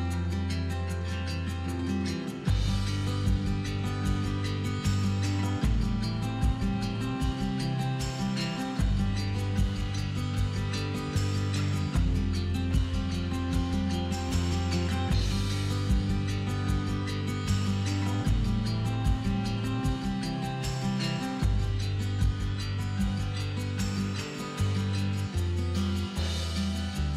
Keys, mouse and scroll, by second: 0.3 click, 0.6-1.8 middle drag, 1.5-1.8 scroll up 2, 1.8 click, 2.5 x, 3.2-4.6 middle drag, 3.2 scroll down 2, 4.6 click, 6.0 x, 7.8-8.1 middle drag, 8.1 click, 8.9 x, 9.4-11.3 middle drag, 10.1 scroll up 2, 10.6-11.3 scroll up 2, 11.3 click, 11.8 shift+click, 12.5 f, 13.2 click, 13.6 shift+click, 14.3 f, 14.5 scroll down 2, 14.7 middle click, 15.1 scroll down 1, 15.6 click, 15.8 scroll down 1, 16.0-19.8 middle drag, 16.7 scroll up 1, 17.7 scroll down 1, 18.5 a, 19.8-21.3 drag, 21.3-23.4 middle drag, 23.4 drag, 23.7-26.8 middle drag, 24.9 KP_3, 25.5-25.8 scroll up 2, 26.2-26.8 scroll down 2, 26.8 click.